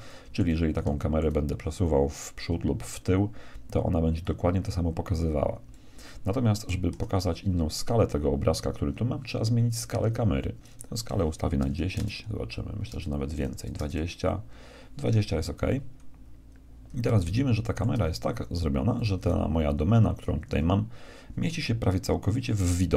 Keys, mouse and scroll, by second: 1.8-3.5 drag, 3.7 click, 6.9 KP_0, 10.6-12.4 drag, 12.9 Return, 15.9-19.1 middle drag, 18.9-20.7 right drag.